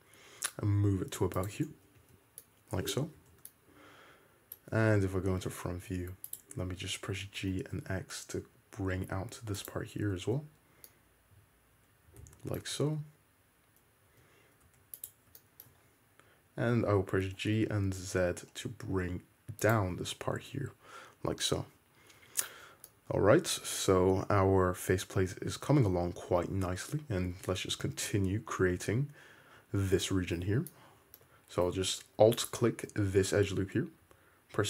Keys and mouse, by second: 2.1 Tab, 2.1-3.2 middle drag, 3.3 alt+z, 4.8 `, 6.1 Tab, 6.4 click, 7.3 g, 8.2-10.6 shift+drag, 10.4 Tab, 12.8 `, 14.2 Tab, 14.8 1, 15.2 click, 15.4 shift+middle click, 17.4 g, 20.6 `, 22.3 Tab, 25.4 `, 27.5 Tab, 28.1 `, 28.4-30.7 middle drag, 30.7 shift+click, 31.3 middle click, 32.3 alt+click, 34.1 e.